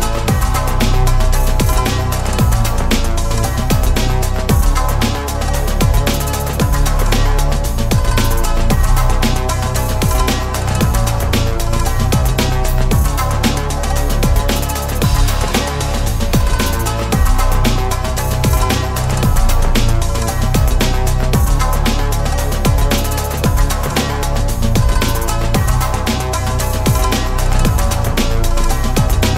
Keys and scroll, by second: 6.9 ctrl+z.